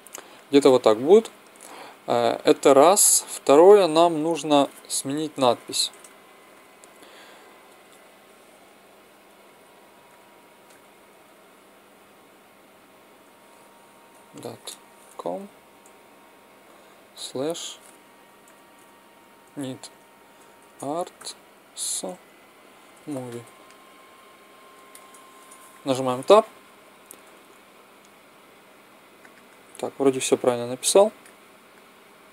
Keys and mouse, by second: 4.1 Tab, 5.3-5.8 BackSpace, 8.4-11.2 typing, 13.2-15.7 typing, 17.1 /, 18.4 shift+n, 18.7 shift+i, 19.4 shift+d, 20.5 shift+a, 20.9 r, 21.0 t, 21.6 s, 22.8-24.6 typing, 25.3 Tab, 27.2 s, 30.1-31.7 drag.